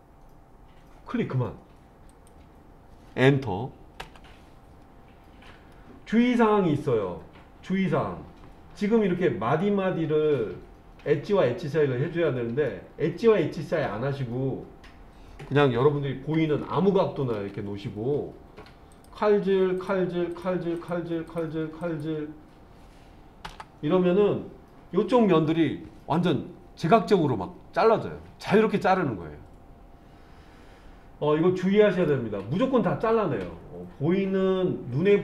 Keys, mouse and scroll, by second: 5.7-9.6 middle drag, 12.1-12.7 scroll down 1, 12.7-13.9 middle drag, 15.6 scroll down 1, 16.6 shift+middle click, 18.9-23.5 drag, 31.6 middle click.